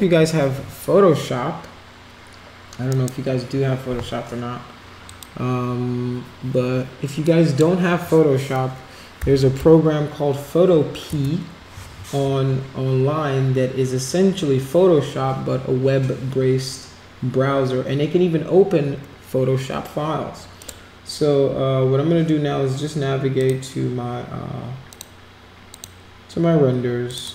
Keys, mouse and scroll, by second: 2.9 right click, 5.0 click, 7.2 click, 9.0-10.0 typing, 11.1 Return, 20.6 click, 23.4 click, 24.9 click, 25.7 click, 27.1 click, 27.2 click.